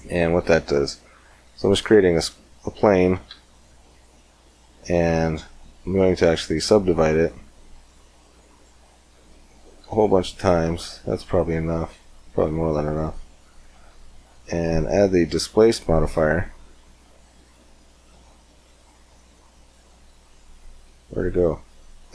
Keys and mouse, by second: 1.4 Tab, 3.1 w, 7.0-9.6 typing, 11.0-12.8 drag, 12.8 Tab, 14.6-22.1 drag.